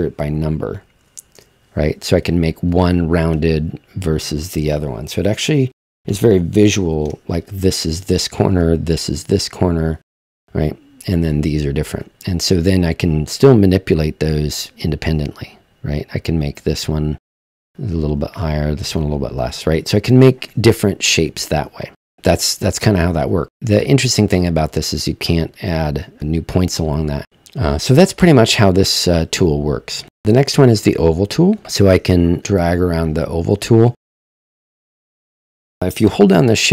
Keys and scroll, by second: 0.6-1.5 typing, 4.5 typing, 6.0-6.8 typing, 9.6-10.3 typing.